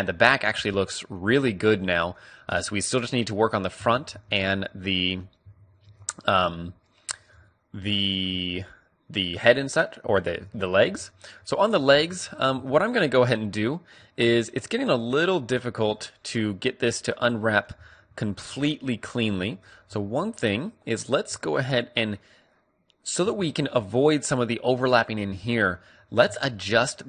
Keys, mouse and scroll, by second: 1.2 a, 3.0-6.8 middle drag, 4.2 a, 5.4 a, 5.8 a, 7.2-11.9 middle drag, 11.9 a, 12.3 a, 15.8-18.5 middle drag, 19.1 a, 19.6 a, 21.0 a, 23.2 a, 25.8-27.0 middle drag.